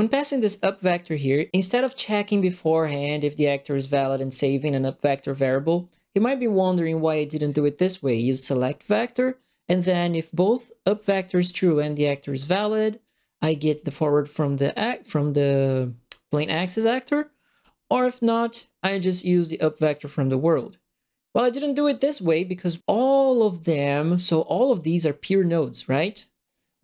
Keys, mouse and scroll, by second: 2.0 right click, 3.0 click, 4.3 click, 5.4 click, 5.7 right click, 6.1 right click, 6.5 right click, 7.4 scroll up 2, 8.3 click, 10.5 click, 12.1 click, 13.6 click, 17.5 click, 23.3 click, 24.7 click, 26.4 right click.